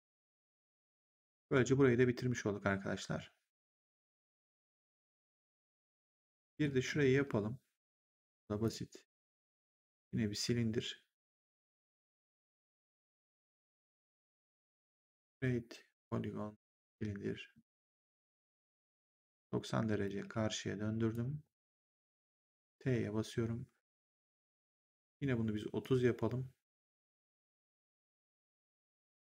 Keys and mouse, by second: 5.6 middle click, 8.5 click, 12.0 click, 14.9 click, 16.5 click, 17.7 e, 18.9 click, 20.1 w, 21.0 click, 25.7 click.